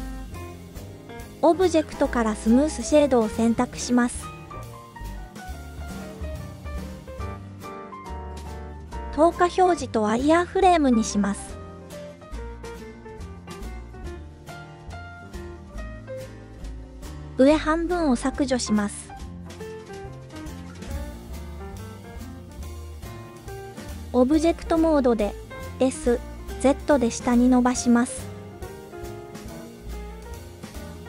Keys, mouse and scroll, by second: 1.9-4.6 drag, 5.4 KP_1, 9.2 click, 11.7-12.3 scroll up 5, 14.3-15.3 drag, 16.3 click, 17.2-18.5 drag, 19.1 x, 23.1-23.7 drag, 24.6 s, 25.3 z, 30.3 click.